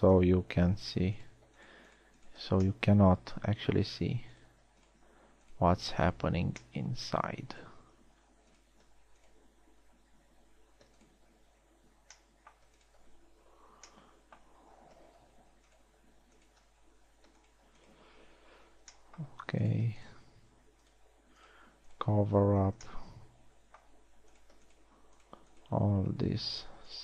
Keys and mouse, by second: 1.4 f, 3.2 f, 7.0 f, 8.8 z, 10.9 z, 11.3 z, 12.2 z, 14.4 f, 16.0 z, 17.5 z, 19.4 f, 23.3 f, 26.8 f.